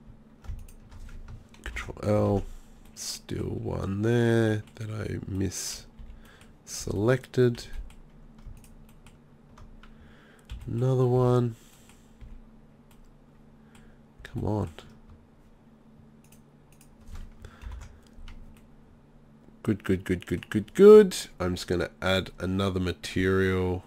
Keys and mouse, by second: 0.6 b, 1.7 ctrl+l, 2.3 ctrl+z, 4.2 middle click, 6.0 b, 6.8 b, 7.7 b, 10.5 b, 11.2 b, 12.2 b, 14.2 b, 17.7 ctrl+l.